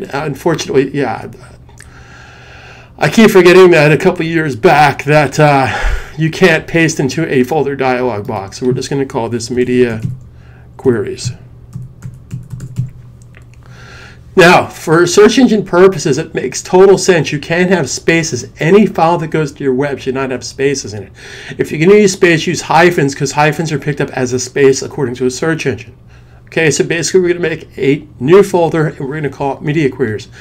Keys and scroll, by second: 9.1-13.1 typing.